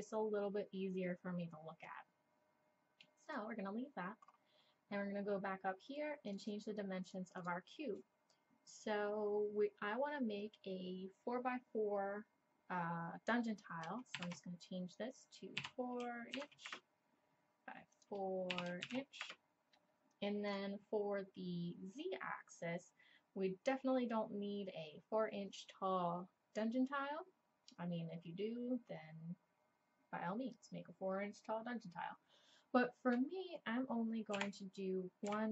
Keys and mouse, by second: 3.3-8.0 drag, 17.9 click, 20.5 click.